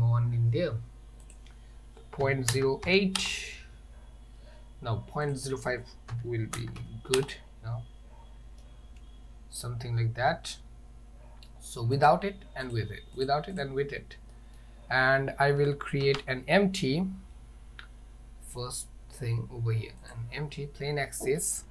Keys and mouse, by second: 1.3-3.9 drag, 5.4-7.9 drag, 8.7-9.7 middle drag, 12.0 click, 12.7 click, 13.2 click, 13.6 click, 14.4 middle click, 16.1 shift+a, 21.1 middle click.